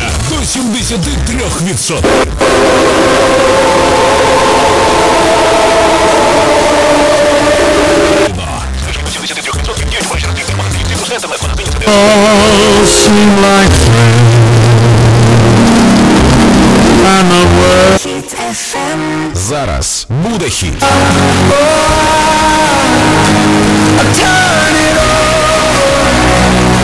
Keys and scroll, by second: 8.9 Page_Down, 18.0 Page_Down.